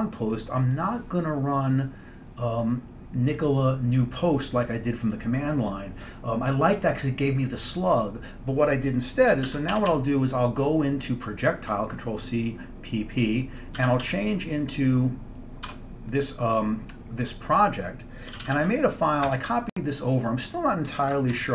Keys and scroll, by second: 9.6 ctrl+c, 9.8 typing, 13.7-14.7 typing, 15.8 Return, 18.2-19.2 typing, 19.4 Return, 21.0 ctrl+1.